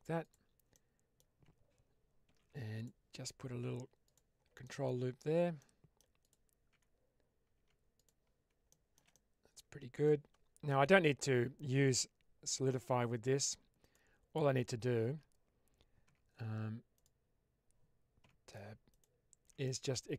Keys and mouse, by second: 0.1 click, 0.6 middle click, 2.2 ctrl+r, 3.9 click, 4.5 middle click, 4.8 Tab, 5.5 middle click, 6.1 click, 6.6 Tab, 7.4 Tab, 7.9 click, 8.7 shift+middle click, 9.1-10.0 middle drag, 11.0 click, 12.7 Tab, 13.8 alt+click, 14.5 alt+click, 15.9 Tab, 18.1 Tab, 18.9 alt+click, 19.5 middle click.